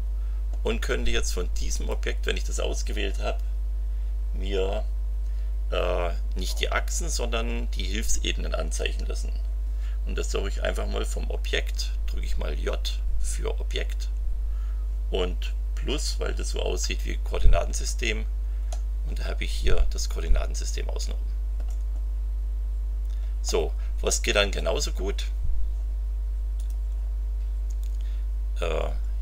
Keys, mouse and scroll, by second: 1.7 click, 13.6 j, 18.7 click, 19.3 scroll down 1, 23.4-24.7 middle drag, 26.5 click.